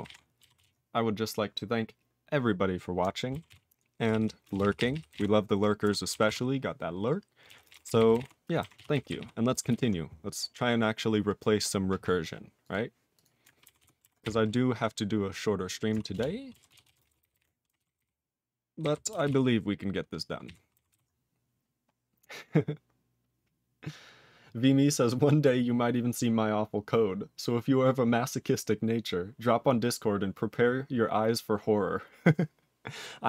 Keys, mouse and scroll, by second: 0.0 ctrl+n, 0.0 ctrl+g, 0.1 ctrl+e, 0.6 ctrl+s, 3.5 ctrl+s, 4.0 ctrl+p, 4.2 ctrl+p, 4.4 ctrl+space, 4.5 ctrl+a, 4.6 ctrl+p, 4.8 ctrl+p, 4.9 ctrl+p, 5.1 ctrl+e, 5.8 ctrl+g, 6.3 ctrl+s, 7.5 ctrl+a, 7.6 ctrl+space, 7.7 ctrl+e, 7.7 ctrl+n, 7.8 ctrl+n, 8.0 ctrl+n, 8.1 ctrl+g, 8.2 ctrl+e, 8.7 ctrl+s, 8.9 ctrl+n, 9.2 ctrl+e, 9.7 ctrl+s, 10.4-11.0 scroll up 5, 12.6 click, 12.7 click, 13.2 click, 13.2 click, 13.8 ctrl+x, 16.1 ctrl+Return, 16.7 ctrl+s, 16.8 ctrl+a, 17.0 ctrl+space, 17.0 ctrl+e, 17.1 ctrl+n, 17.2 ctrl+n, 17.3 ctrl+g, 17.4 ctrl+e, 17.8 ctrl+s, 17.8 ctrl+n, 18.0 ctrl+n, 19.1 ctrl+n, 19.3 ctrl+s, 20.4 ctrl+e, 20.9 ctrl+s.